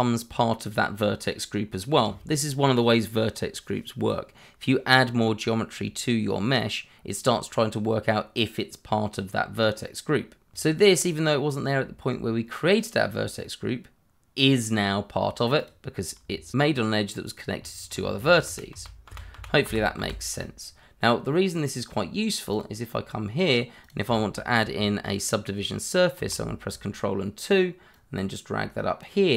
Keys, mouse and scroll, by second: 10.5 click, 15.5 click, 16.4 shift+click, 17.9 ctrl+z, 20.6 scroll down 1, 22.5 click, 24.2 shift+middle click, 26.6 ctrl+2, 27.9 click.